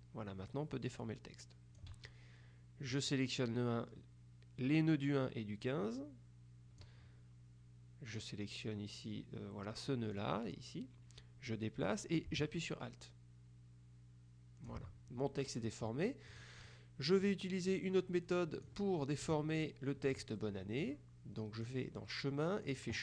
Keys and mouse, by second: 3.0-7.4 drag, 10.2-15.3 drag, 16.5-17.9 drag, 19.4 KP_Subtract, 20.5 middle click, 21.8 click, 22.7 click.